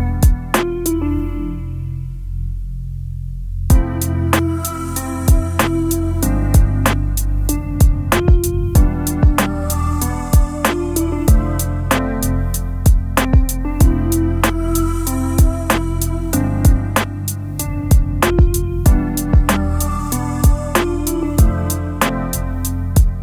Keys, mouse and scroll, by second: 1.1 shift+click, 7.9-9.0 alt+scroll down 3, 9.2-11.0 space, 22.9-23.2 alt+scroll down 3.